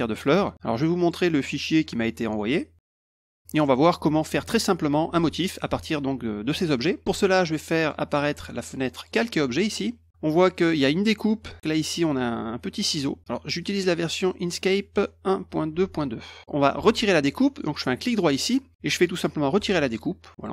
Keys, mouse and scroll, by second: 1.0 click, 1.7 click, 2.7 click, 3.1 click, 3.4 middle click, 7.8 click, 9.0 click, 13.6 click, 14.2 click, 18.1 right click, 19.5 click, 19.9 click, 20.4 click.